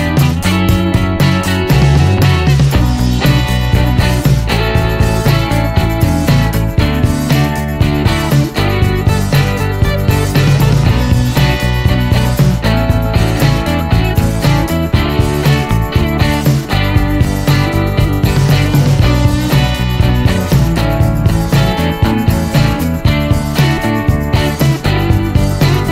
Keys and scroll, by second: 0.6-3.0 typing, 4.6-6.3 typing, 17.5 BackSpace, 17.8 BackSpace, 19.9 Left, 20.2 Left, 20.3 Left, 20.8 Left, 21.0 Left, 21.1 Left, 21.4 Left, 21.8 Left, 22.0 Left, 22.3 Left, 22.7 Left, 22.8-23.6 Left, 23.6 Left, 24.1 Left, 24.2 Left, 24.3 Left, 24.7 Left, 24.9 Left, 25.2 Left, 25.4 Left, 25.6 Left, 25.7 Left.